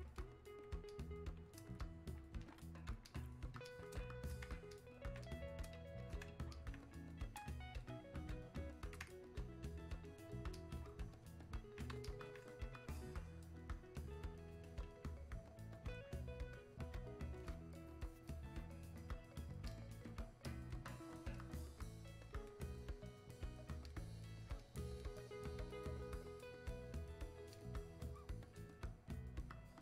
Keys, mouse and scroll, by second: 21.7-29.8 drag.